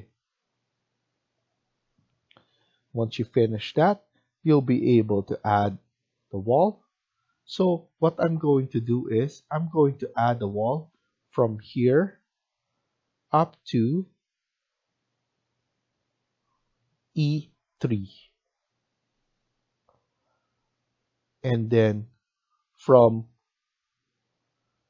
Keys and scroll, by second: 22.3 Escape.